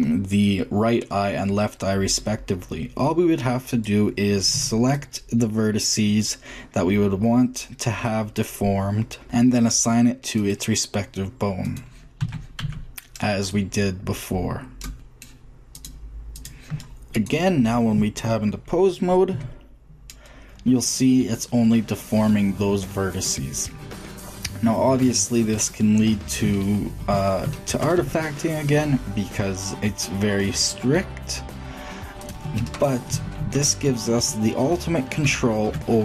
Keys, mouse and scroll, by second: 3.5-5.4 drag, 4.3 c, 9.2 click, 10.2 middle click, 12.0 a, 12.4 c, 15.5 middle click, 16.7 Tab, 16.7 a, 19.1 g, 24.9 middle click, 27.8 shift+g, 31.3 middle drag, 33.2 ctrl+z, 35.6-36.0 middle drag.